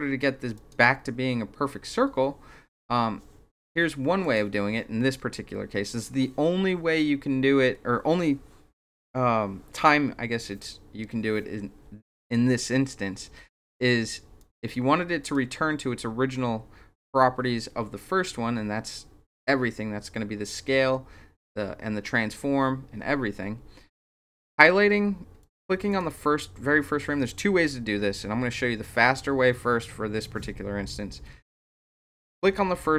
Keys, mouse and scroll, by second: 0.5 click, 4.2 click, 13.5 click, 14.4 click, 15.2 click, 25.4 click, 25.9 click.